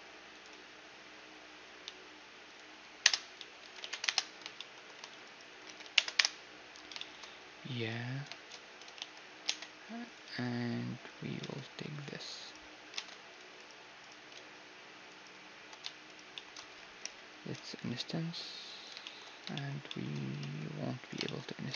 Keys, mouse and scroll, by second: 3.0 z, 3.2 s, 4.1 middle click, 4.8-7.0 right drag, 5.3 s, 7.0-9.0 middle drag, 7.0 z, 8.3 z, 8.6 z, 9.0 ctrl+Tab, 9.9 z, 10.7-12.0 middle drag, 11.0 ctrl+Tab, 12.0-17.5 right drag, 12.6 ctrl+Tab, 15.9-17.5 drag, 17.5 middle click, 18.6-20.0 middle drag, 20.0 ctrl+Tab.